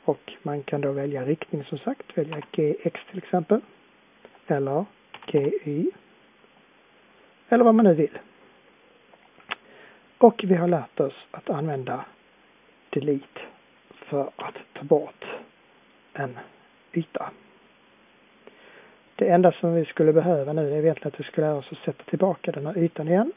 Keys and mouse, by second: 9.7-14.3 middle drag, 14.3 Delete, 14.3 click, 17.1-19.1 middle drag, 20.3-23.3 middle drag.